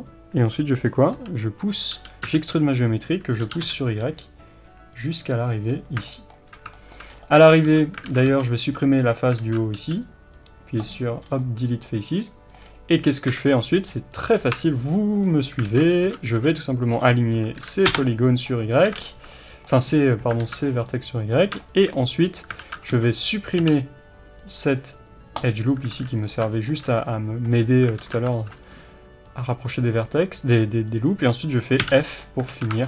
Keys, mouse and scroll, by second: 1.2 e, 2.0 g, 6.8-7.9 shift+middle drag, 7.1-7.5 scroll up 1, 7.9 click, 8.1 alt+a, 8.6 b, 8.9-18.6 middle drag, 9.4 alt+z, 10.9 x, 11.2 scroll down 1, 12.6-13.3 scroll down 1, 13.3 KP_1, 13.9-14.5 scroll up 1, 14.5 KP_3, 15.3-15.6 scroll up 1, 15.6 alt+z, 16.4 b, 18.6 click, 18.8 alt+a, 19.1 scroll down 1, 19.3-26.3 shift+middle drag, 19.8 scroll down 1, 20.5 alt+z, 20.7-21.3 scroll up 1, 22.0-22.6 scroll up 1, 22.6 alt+z, 23.1 b, 25.5 x, 25.9 alt+a, 26.3 click, 26.9 scroll down 1, 27.1-31.9 middle drag, 28.0 alt+z, 28.6-29.6 scroll up 1, 31.9 f, 32.2-32.5 scroll down 1, 32.5 alt+a, 32.7 Tab.